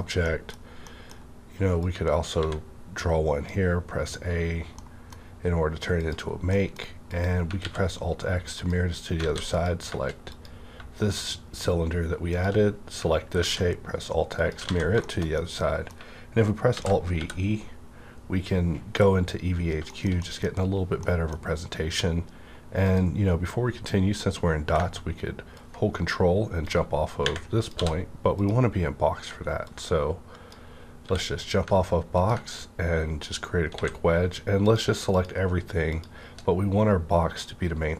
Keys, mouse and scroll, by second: 1.8-4.2 drag, 2.4 a, 4.2-4.7 scroll down 1, 4.7 middle click, 4.9 middle click, 4.9 scroll down 1, 6.0 click, 6.3 scroll down 1, 6.4 scroll up 1, 6.5 middle click, 7.0 click, 7.6 alt+x, 8.5 click, 9.2 alt+a, 9.5 click, 10.3 click, 13.4 alt+x, 14.6 alt+a, 15.0 middle click, 15.3 middle click, 16.7 alt+v, 17.1 e, 19.7 alt+v, 19.7 e, 19.9 shift+middle click, 19.9 e, 22.8 click, 25.5-29.3 ctrl+drag, 27.7 d, 29.6-32.1 ctrl+drag, 31.0 w, 33.7 a, 34.6 ctrl+click, 35.1 shift+click.